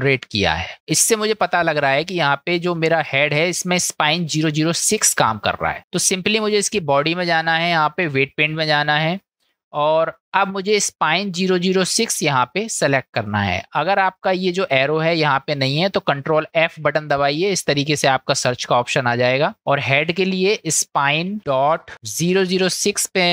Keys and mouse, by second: 5.8 click, 7.2-8.5 drag, 9.6 middle click, 14.1 click, 16.7 ctrl+f, 22.4 KP_0.